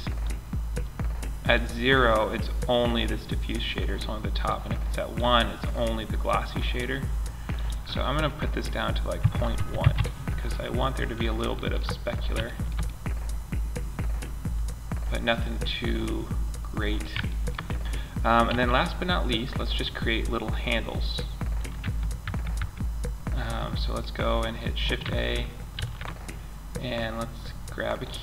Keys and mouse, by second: 1.4-2.1 middle drag, 12.6-13.6 middle drag, 14.8-16.7 middle drag, 17.9 a, 18.4 click, 21.1 Tab, 21.6 Tab, 21.9 Tab, 25.1 shift+a.